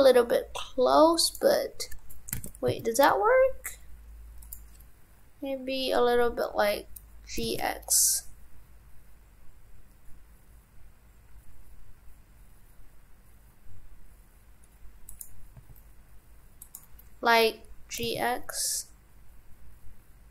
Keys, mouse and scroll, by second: 2.3 shift+f.